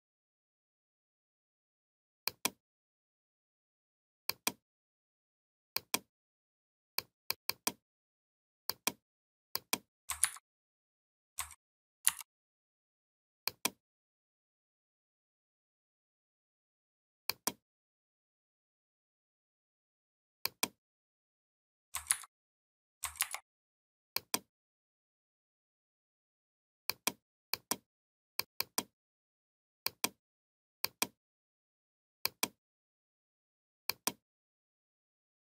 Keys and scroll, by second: 10.1 ctrl+c, 11.9 ctrl+b, 21.9 ctrl+c, 23.0 ctrl+f.